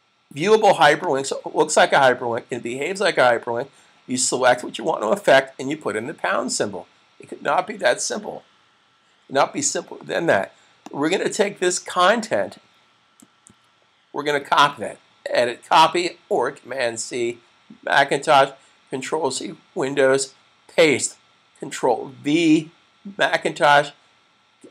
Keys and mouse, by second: 10.7 click, 13.2 super+c, 15.5 click.